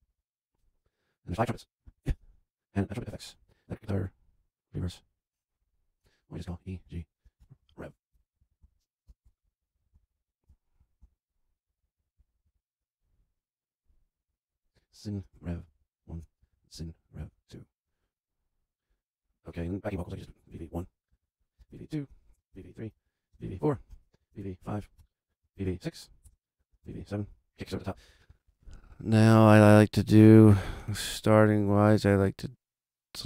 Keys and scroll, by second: 0.0 super+Down, 1.5 Return, 6.2 Left, 6.4 Delete, 6.6 Right, 6.7 Delete, 7.3 shift+r, 7.4 shift+Right, 7.6 Delete, 8.1 super+Down, 8.3 super+Left, 8.4 Right, 8.5 Delete, 9.1 shift+g, 9.3 shift+Delete, 9.6 Right, 9.8 Delete, 10.7 super+Left, 10.8 Right, 10.9 Delete, 11.2 Right, 11.4 Delete, 11.7 Right, 12.1 Delete, 12.4 super+Down, 13.8 Left, 14.0 Right, 14.7 Delete, 15.2 shift+r, 15.4 shift+Right, 15.5 Delete, 16.3 super+Left, 16.4 Right, 16.6 Delete, 16.9 Right, 17.1 Delete, 17.5 super+Down, 20.1-27.4 typing, 21.1 super+Down, 27.6 super+Return.